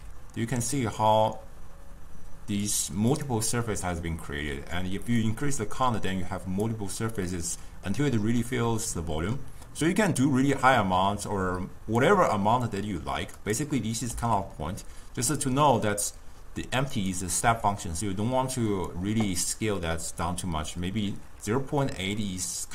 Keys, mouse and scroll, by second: 0.0 s, 3.2 click, 5.4-7.4 drag, 7.4-10.4 middle drag, 10.4-13.4 drag, 13.5 click, 14.3 s, 17.6 s.